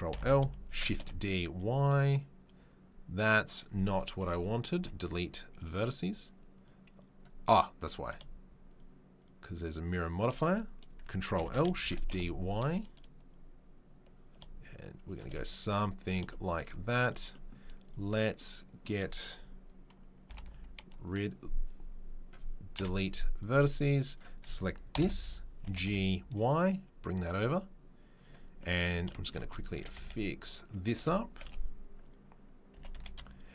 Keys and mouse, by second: 0.1 ctrl+l, 0.7 shift+d, 4.7 Delete, 8.7 shift+click, 8.8 shift+middle click, 9.1 shift+click, 9.2 shift+middle click, 9.9 shift+click, 10.0-16.9 shift+middle drag, 11.8 shift+d, 16.9 click, 17.9-24.0 middle drag, 20.3 ctrl+l, 22.7 Delete, 24.0 right click, 24.1-33.5 ctrl+middle drag, 24.9 ctrl+l, 25.6 g, 29.7 s, 30.9 s, 32.7 g.